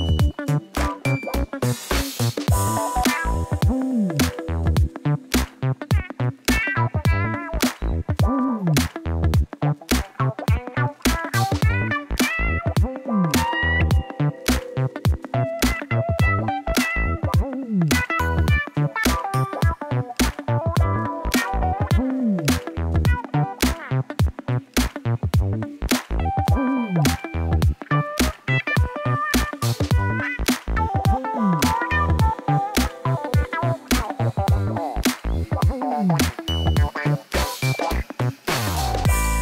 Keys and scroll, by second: 1.4 r, 1.8 x, 2.2 g, 2.6 alt+a, 4.6 g, 5.3 r, 6.5 alt+a, 8.7 ., 9.0 g, 17.9 shift+a, 21.1 l, 22.4 shift+a, 29.0 ctrl+z, 30.9 shift+a.